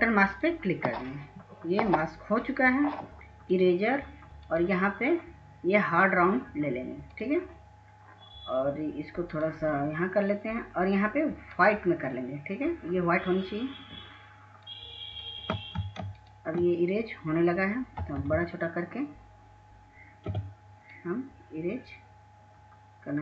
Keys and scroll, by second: 0.4 ctrl+s, 0.7 ctrl+s, 18.7 ctrl+space, 19.2 ctrl+space, 20.7 ctrl+space, 20.7 ], 20.9 ], 21.1 ], 23.0 Caps_Lock.